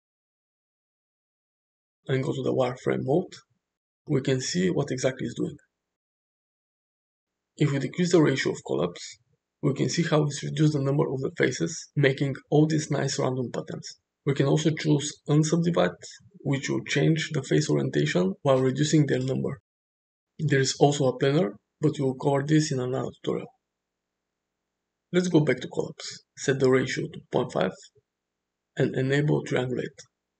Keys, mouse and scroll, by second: 1.2 click, 2.6 click, 6.1 click, 8.4-13.7 drag, 14.4 click, 16.4 click, 17.1 click, 17.6 click, 26.0-28.5 drag.